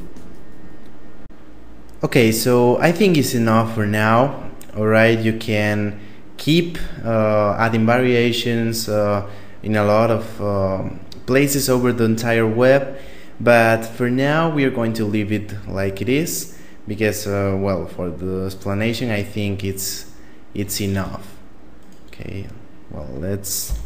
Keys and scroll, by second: 20.3 Tab, 23.1 ..